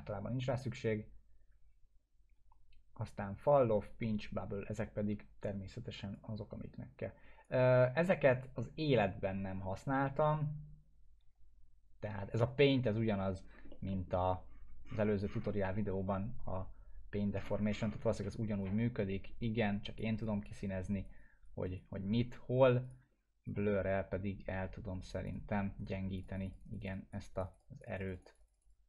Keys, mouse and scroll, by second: 6.1-7.7 drag, 13.4 scroll down 1, 13.7 middle click, 13.9 alt+middle click, 14.4-15.9 scroll down 2, 15.9-17.1 scroll down 1, 17.3-18.6 scroll up 2, 18.6-20.1 drag.